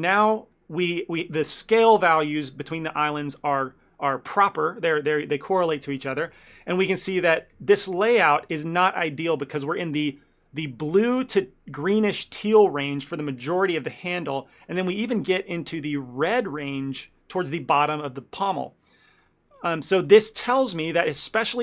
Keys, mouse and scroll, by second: 6.4 shift+middle click, 6.7 ctrl+middle click, 7.5 a, 7.6 a, 8.3 shift+middle click, 8.5 ctrl+middle click, 14.9 shift+middle click, 15.4 scroll up 1, 16.5 scroll up 2, 16.8 shift+middle click, 17.1 scroll up 1, 17.9-18.4 scroll up 1, 19.3-19.8 scroll down 8, 21.5 scroll up 1.